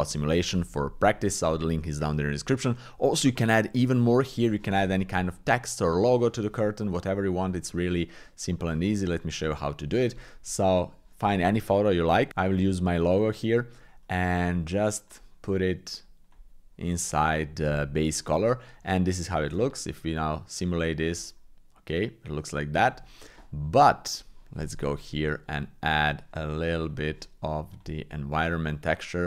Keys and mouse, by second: 7.0-9.8 drag, 10.7 shift+click, 13.4 click, 15.0 click, 15.3-16.3 drag, 19.4 shift+space, 24.0 click, 29.2 click.